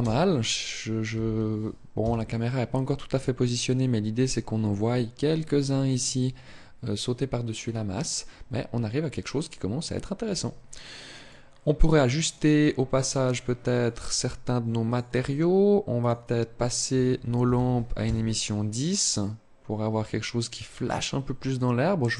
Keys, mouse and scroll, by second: 10.9 click, 12.7 click, 13.4 click, 14.6 click, 15.7 click.